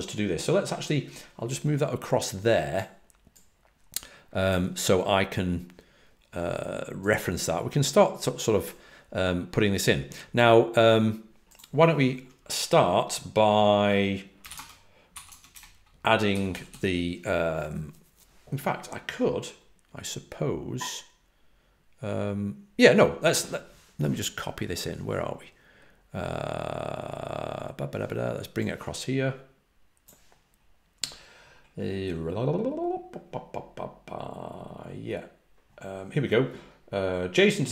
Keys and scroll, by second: 15.1 g, 15.2 Tab, 15.4 Return, 16.2 j, 16.4 j, 16.6 j.